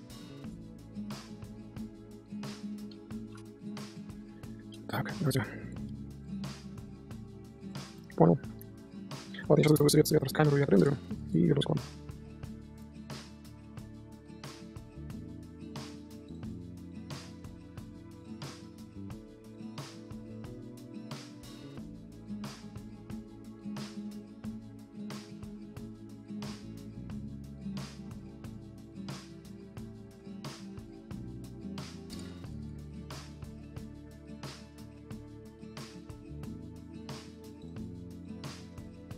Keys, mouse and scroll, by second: 0.4 Tab, 0.4 click, 0.5 scroll down 2, 0.6-1.1 middle drag, 1.1 z, 2.9 KP_0, 3.6 click, 3.8 scroll down 1, 3.9-4.3 right drag, 4.3 middle click, 4.4 KP_7, 4.5-4.8 scroll up 1, 4.8 z, 4.9 scroll down 1, 5.0 click, 5.9 g, 6.6 scroll up 2, 7.0 g, 8.2 shift+middle click, 8.3 shift+a, 9.3 click, 9.5-11.4 middle drag, 13.0-13.6 middle drag, 13.6 shift+a, 14.7 KP_3, 15.4 g, 15.8 click, 15.9 middle drag, 16.0 z, 16.1 middle drag, 16.3 z, 16.4 shift+middle drag, 16.7 scroll up 1, 16.9 middle click, 17.6 scroll up 2, 17.7-18.1 shift+middle drag, 18.1-19.0 scroll down 2, 18.4 middle click, 19.0-19.7 scroll up 2, 19.7 ctrl+alt+KP_0, 20.3 click, 21.5 click, 21.9 scroll up 2, 22.1 z, 22.5 g, 23.4 click, 23.5 scroll down 1, 24.0 click, 24.8 click, 24.9 click, 25.7 t, 27.0-27.4 scroll up 2, 27.7 click, 27.8 click, 28.2 scroll down 1, 29.1 scroll down 1, 29.5 scroll up 1, 29.7-30.1 scroll down 1, 30.1 click, 30.3 click, 30.4-31.7 drag, 32.0 click, 32.6-32.9 middle drag, 32.9 scroll down 1, 32.9 scroll up 10, 33.3-33.7 shift+middle drag, 33.7 shift+h, 33.8 middle drag, 34.0 z, 34.1 shift+middle click, 34.6 click, 34.7-35.0 scroll down 1, 35.0 scroll up 2, 35.7-36.7 drag, 36.7 KP_0, 37.1 click, 37.8 ctrl+2, 38.1 click, 38.4-39.1 scroll down 2.